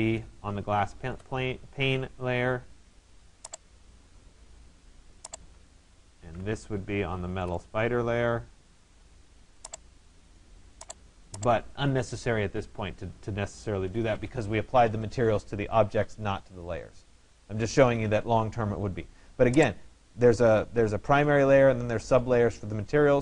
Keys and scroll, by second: 5.8 ctrl+a.